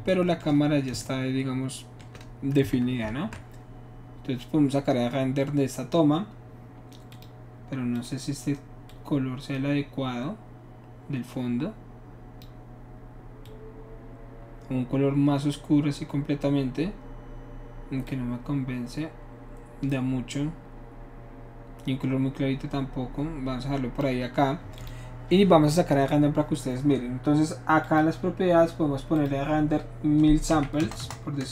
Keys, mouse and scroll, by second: 3.0 ctrl+shift+s, 7.1 click, 7.9 click, 8.9-12.4 drag, 13.5-15.5 drag, 18.0 click, 21.5-24.0 drag, 24.7 click, 27.8 click, 29.2 click, 30.6 KP_1, 30.8 KP_0, 31.4 KP_0.